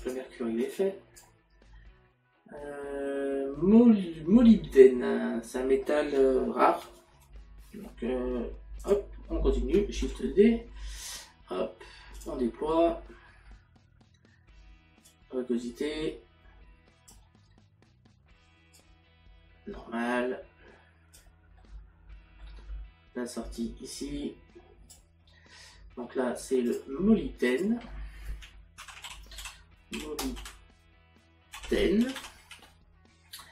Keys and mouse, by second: 8.8 click, 12.2 click, 15.1 click, 18.8 click, 21.6 middle click, 23.6 click, 26.7 click.